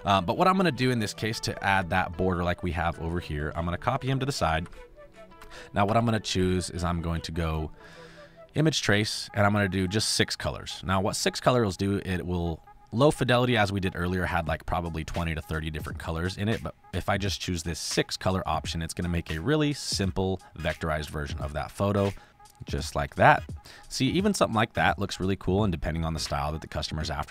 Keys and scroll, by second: 2.1 space, 3.9 ctrl+c, 4.2 ctrl+b, 4.4 Right, 5.8 Right, 23.0 space, 26.4 space.